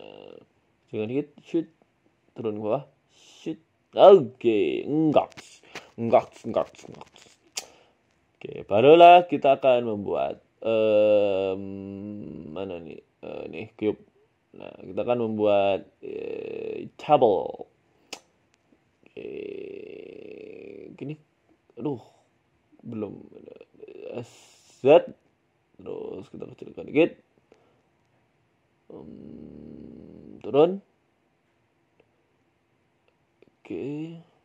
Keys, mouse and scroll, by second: 0.8 s, 1.7 middle click, 2.5 g, 4.5 middle click, 4.7 scroll down 3, 6.0-8.3 scroll down 1, 9.3 shift+a, 14.0 middle click, 14.6 KP_7, 15.3 s, 16.1 s, 17.2 g, 17.9 s, 18.9 g, 20.6 s, 21.5 scroll down 1, 21.5 middle click, 22.3 KP_3, 23.0 g, 23.9 s, 25.7 shift+middle click, 26.2 s, 27.3 scroll up 3, 27.5 shift+middle click, 27.9 s, 30.3 g, 31.7 middle click, 32.1 scroll down 2, 33.0 g, 34.1 KP_4, 34.3 KP_7.